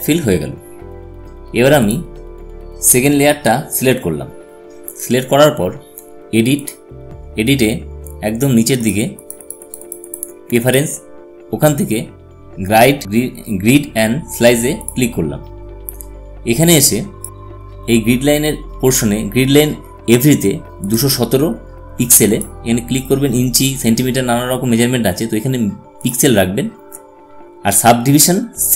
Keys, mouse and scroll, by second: 1.8 click, 6.9 click, 15.1 click, 21.7 click, 26.9 click.